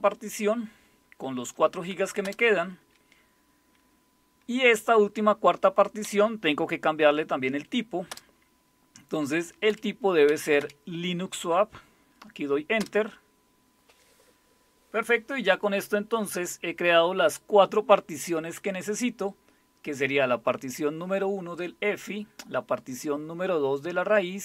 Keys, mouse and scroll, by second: 2.2 Return, 6.0 Right, 8.1 Return, 9.7 Up, 10.3 Down, 10.6 Up, 12.8 Return.